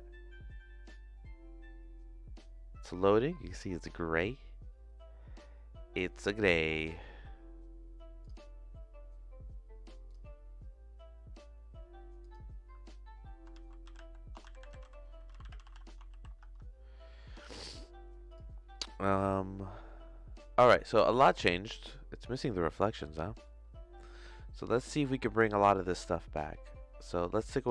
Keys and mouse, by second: 21.2 click, 23.3 middle click, 25.3 middle click, 27.4 click.